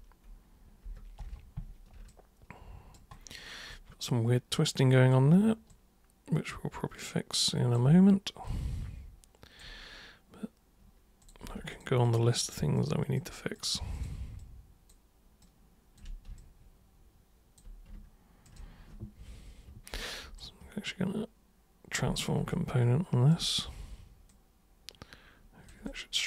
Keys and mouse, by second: 2.1 alt+super+click, 3.7-5.1 alt+super+drag, 5.7-7.8 alt+super+drag, 8.5-9.6 alt+super+drag, 11.2 super+click, 11.7 ctrl+shift+super+click, 12.1 ctrl+shift+super+click, 12.4 ctrl+shift+super+drag, 12.8 ctrl+shift+super+click, 13.2 ctrl+shift+super+click, 13.6 ctrl+shift+super+click, 14.0 ctrl+shift+super+click, 14.4-14.9 ctrl+shift+super+drag, 15.4-16.0 ctrl+shift+super+drag, 16.4-17.6 alt+super+drag, 18.5 ctrl+shift+super+click, 20.4-21.9 shift+super+right drag, 22.5 alt+super+click, 24.3-25.7 super+drag, 25.9-26.2 alt+super+drag.